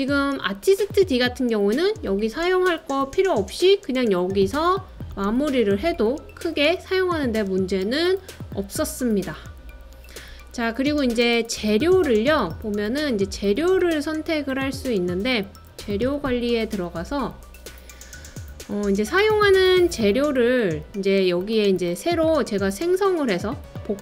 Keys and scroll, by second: 4.2-4.9 typing, 10.4-11.2 typing.